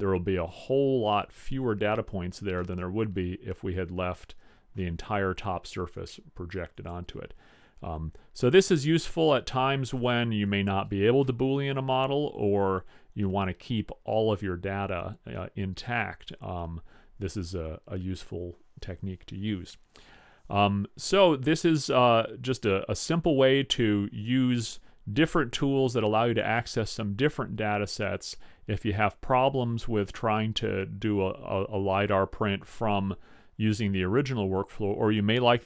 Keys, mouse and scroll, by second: 2.8-4.7 middle drag, 7.9 middle click, 8.1-9.5 middle drag, 10.3-13.3 middle drag, 21.9-23.9 middle drag.